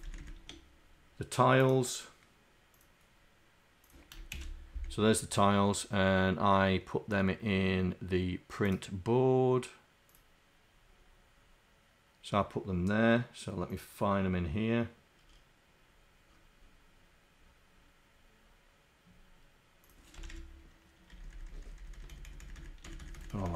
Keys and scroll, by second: 0.2 shift+Down, 21.4 shift+Down, 21.7 shift+Down, 22.0 shift+Down, 23.2 shift+Down.